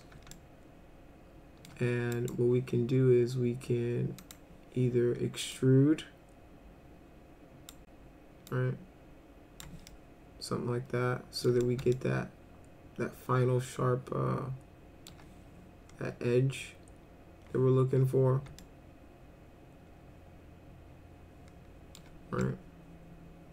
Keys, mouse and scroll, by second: 0.3-1.7 alt+middle drag, 2.2 right click, 4.2 click, 5.5-7.7 drag, 8.5-9.6 drag, 9.9-11.4 alt+middle drag, 11.6 middle click, 11.9-15.1 alt+middle drag, 18.6-22.0 alt+middle drag, 22.4-23.5 alt+middle drag.